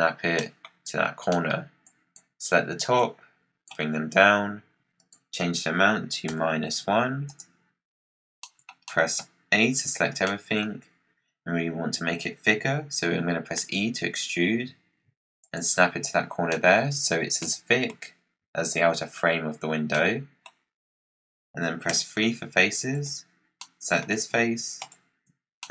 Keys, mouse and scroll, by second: 0.2 scroll up 1, 0.3-1.8 middle drag, 1.8 click, 2.9 click, 4.9-7.9 drag, 8.3-9.6 middle drag, 9.6 a, 9.9 scroll up 3, 10.2 middle click, 10.5-13.5 scroll down 1, 13.5 e, 16.4 middle click, 16.9-17.3 scroll up 9, 17.3 middle click, 17.9-19.3 scroll down 1, 19.3-19.8 scroll down 10, 19.8-21.8 middle drag, 21.8 3, 22.8 click, 23.5-24.7 middle drag, 24.7 shift+click, 25.5-25.7 middle drag.